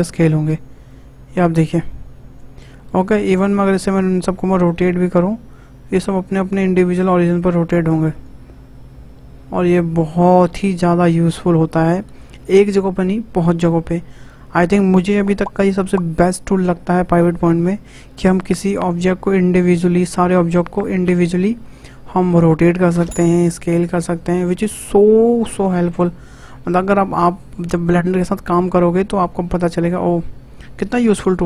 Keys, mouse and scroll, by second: 3.2-3.6 middle drag, 3.6-4.1 scroll up 4, 4.1-4.6 scroll down 2, 4.6 r, 4.7 r, 18.3 r, 23.3 s.